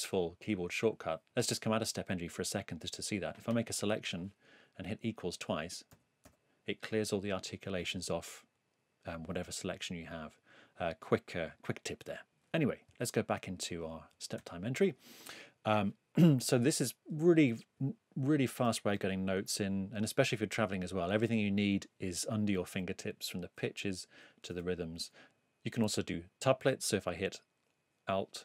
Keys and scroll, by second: 5.9 =, 14.4 super+e, 16.4 8, 17.8-19.4 typing.